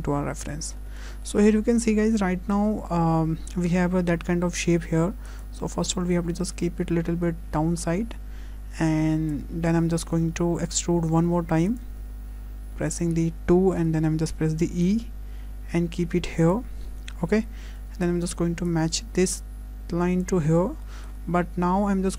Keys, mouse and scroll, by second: 0.9 scroll up 2, 1.3 shift+middle click, 5.3 click, 11.2 2, 11.7 click, 13.8 e, 17.7 1, 18.0 click, 20.2 click, 20.8 shift+middle click.